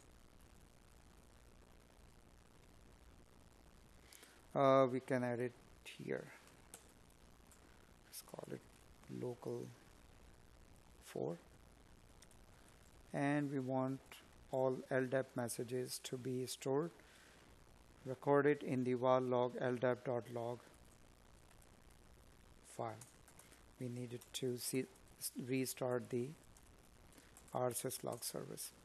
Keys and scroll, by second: 5.7 Escape, 11.2 Escape, 18.9 space, 20.6 space.